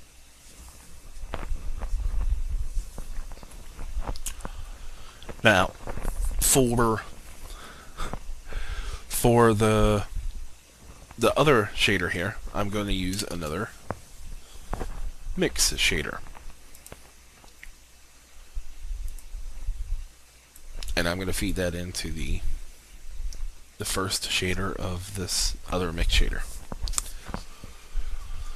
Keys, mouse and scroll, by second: 13.3 shift+a, 16.7-26.2 drag.